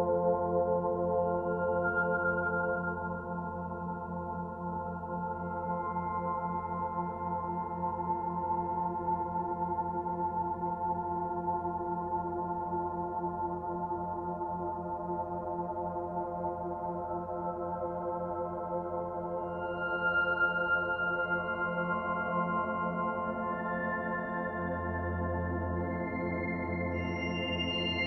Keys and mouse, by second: 0.0-0.7 typing, 2.3-5.6 typing, 6.5-7.4 drag, 7.4 typing, 7.7-8.5 drag, 9.1-10.0 drag, 11.0-11.8 drag, 11.6-12.5 typing, 12.7 Return, 13.8-14.7 drag, 14.5-15.3 typing, 15.5 Return, 17.6 KP_Divide, 18.6-19.4 typing, 19.8-20.6 alt+shift+drag, 21.2 Tab, 23.3 click, 24.7-25.6 drag, 25.8-26.7 drag, 27.8 alt+a.